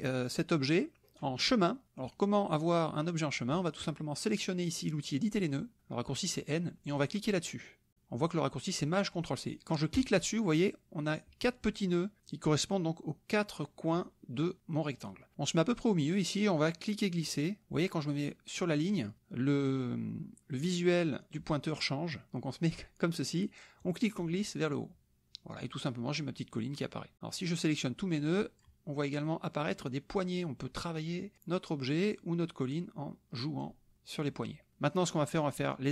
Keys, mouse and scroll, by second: 1.8 middle click, 9.9 click, 23.8-27.1 drag, 27.4-28.8 drag, 30.1-31.3 drag, 32.1-33.8 drag, 33.9 click.